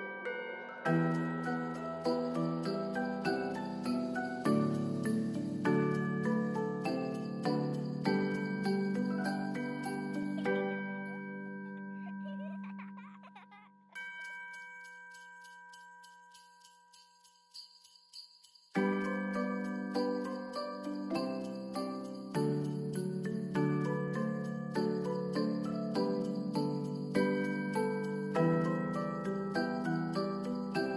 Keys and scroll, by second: 2.7 space, 7.1 ctrl+s, 23.6 s.